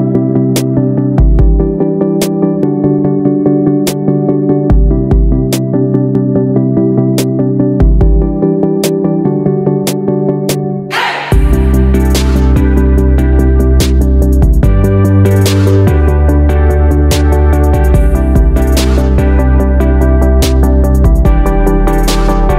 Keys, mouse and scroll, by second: 0.1-2.4 drag, 3.3 Up, 5.7 click, 7.1 shift+click, 9.7 ctrl+d, 10.0-11.9 drag, 12.6 ctrl+d, 12.9 click, 15.6 right click, 16.1-22.5 drag.